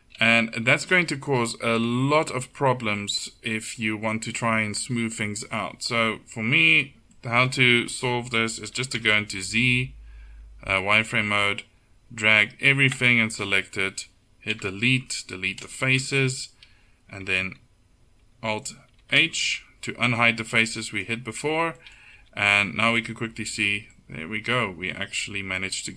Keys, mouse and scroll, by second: 6.7 middle click, 9.1 z, 9.7 a, 14.6 Delete, 19.1 alt+h, 21.3 Tab, 22.2 z.